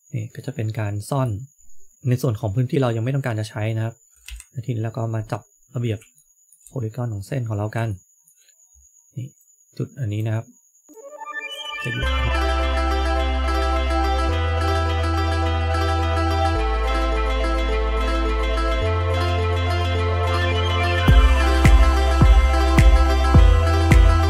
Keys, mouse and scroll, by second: 0.3 middle click, 2.6 middle click, 4.2 KP_1, 5.5-5.9 scroll up 3, 6.1 shift+middle click, 6.1 scroll up 1, 6.6-7.3 scroll up 1, 7.3-7.7 scroll up 2, 7.8 shift+middle click, 8.4 scroll up 1, 9.3 click, 10.8 click, 11.7 shift+middle click, 12.3 click, 12.7 click, 12.9 shift+middle click, 13.3 click, 13.8 click, 14.2 scroll down 2, 14.3 middle click, 14.9 middle click, 15.2 KP_3, 15.4 KP_1, 15.6 shift+middle click, 15.8 scroll up 1, 16.0 click, 16.4 click, 16.8 scroll up 1, 16.9 shift+middle click, 17.1 click, 17.4 click, 17.7 shift+middle click, 18.0 click, 18.2 click, 18.4 shift+middle click, 18.6 click, 18.9 scroll down 2, 19.2 click, 19.4 shift+middle click, 19.7 click, 20.2 scroll down 1, 20.5 click, 20.9 click, 21.5 click, 21.6-21.9 scroll up 2, 21.7 shift+middle click, 22.3 click, 22.5 click, 22.7 middle click, 23.8 click, 23.8 middle click, 24.1 middle click.